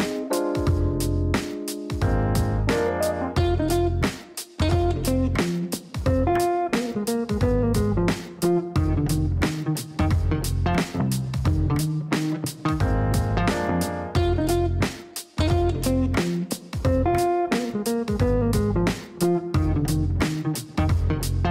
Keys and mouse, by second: 0.7 click, 2.7 click, 3.4 click, 6.3-7.2 typing, 7.5 Down, 13.0-13.9 typing, 14.9 Down, 15.1 Down, 15.2 Down, 15.4 Down, 15.6 Down, 15.7 Down, 15.9 Down, 16.0 Down, 16.7 Return, 18.2 click, 19.1 click, 20.4 click.